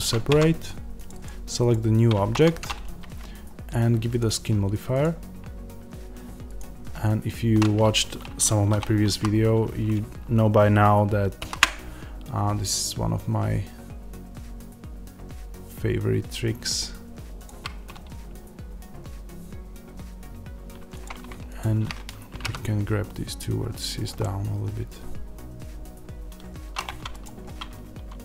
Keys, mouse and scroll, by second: 0.2 Tab, 0.9 click, 2.2 Tab, 6.5-17.4 drag, 8.6 1, 8.9 a, 11.3 ctrl+a, 20.7 middle click, 20.9 click, 22.2 g, 23.9 click, 24.1-27.0 middle drag, 26.8 Tab, 27.0 click, 27.6 Tab.